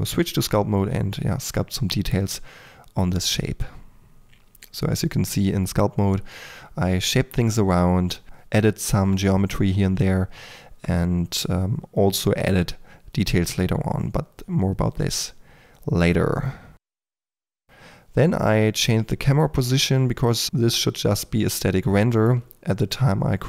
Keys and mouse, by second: 0.0-3.7 typing, 0.6 click, 2.1 click, 2.6 click, 3.1 click, 3.9 ctrl+click, 4.0 click, 4.2 Tab, 5.1 click, 5.5 middle click, 6.9 middle click, 6.9-9.5 typing, 9.6 click, 10.4 middle click, 11.1 drag, 11.1-17.5 typing, 11.5 drag, 11.8 click, 12.1 middle drag, 12.7 middle click, 19.1-21.3 typing, 19.7 Tab, 22.4 f, 22.7 f, 22.9 f, 23.0 KP_8.